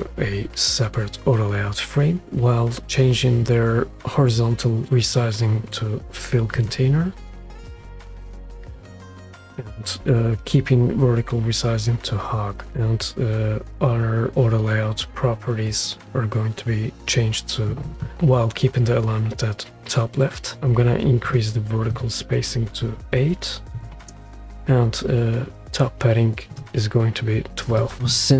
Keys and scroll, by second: 23.8 8, 24.0 Return.